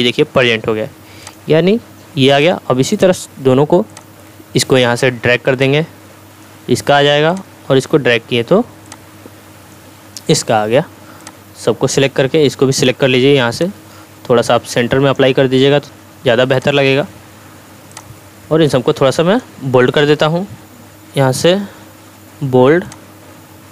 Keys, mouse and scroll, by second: 0.4-3.6 drag, 22.9 click.